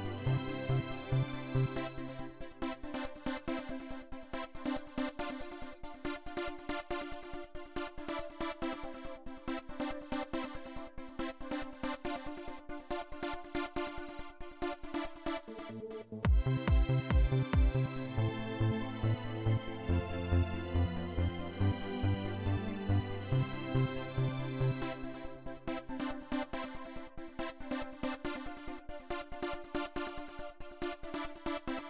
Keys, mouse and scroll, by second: 1.5 click, 3.6 click, 4.9 click, 6.3-7.5 drag, 14.1 click, 14.8 right click, 15.9 click, 30.1 right click, 31.1 click.